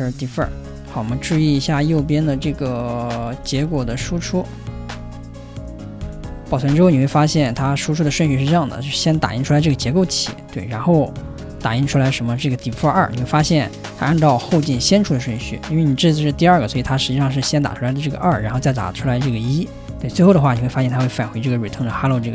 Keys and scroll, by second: 0.0-2.2 typing, 2.3 alt+Right, 3.3 alt+Left, 3.5 ,, 3.8 alt+Right, 4.0 Return, 4.9 alt+Left, 5.7-7.5 typing, 10.2 3.